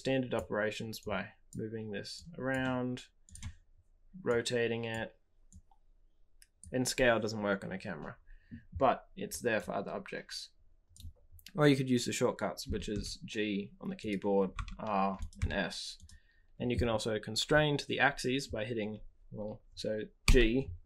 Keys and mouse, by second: 0.9-1.5 drag, 2.1-2.5 drag, 3.3-4.9 drag, 4.9 middle click, 6.6-9.5 middle drag, 12.8-20.2 middle drag, 12.8 g, 14.5 r, 15.3 s, 20.2 g.